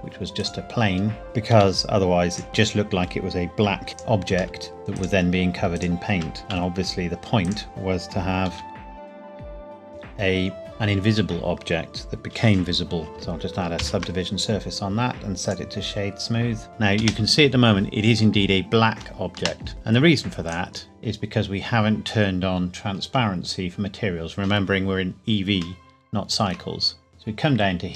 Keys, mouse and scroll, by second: 0.3 click, 1.5 g, 2.3 click, 2.5 middle click, 3.9 click, 4.5 middle click, 4.7 click, 5.7 shift+click, 6.4 g, 6.5 z, 7.4 click, 8.5 g, 8.8 click, 9.2 Tab, 9.3-9.7 scroll up 2, 9.4 click, 9.7 ctrl+r, 9.8 Tab, 13.1 Tab, 13.7 ctrl+2, 15.4 right click, 16.7 space, 19.3 space, 20.4 click, 22.5 scroll down 1, 25.7 shift+middle click, 26.7-27.2 scroll up 1, 27.8-27.9 scroll up 1.